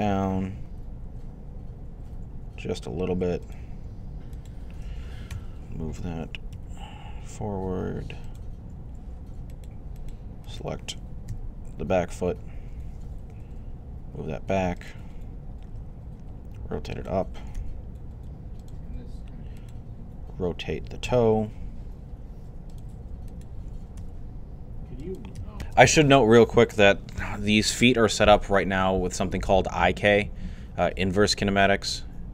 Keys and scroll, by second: 0.3-1.0 typing, 5.1-6.8 typing, 11.1 z, 12.7-13.6 typing, 15.5 r, 17.1-17.9 typing, 20.9 r, 23.8 g.